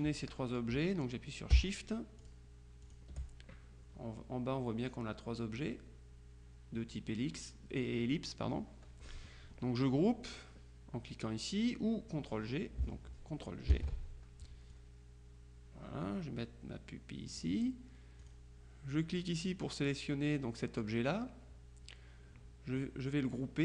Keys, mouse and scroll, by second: 2.3 shift+click, 2.9 click, 13.8 ctrl+g, 14.8-18.0 drag, 18.3 click.